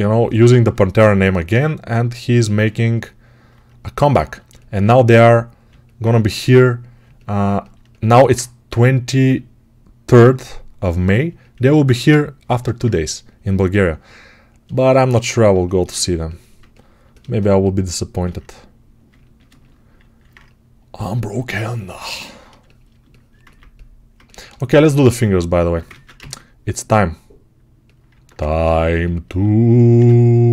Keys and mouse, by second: 18.0 alt+q, 20.9-23.0 ctrl+alt+drag, 23.0-28.0 alt+shift+right drag, 25.7 ctrl+Tab, 26.0 shift+a, 28.0 Tab, 30.2 s.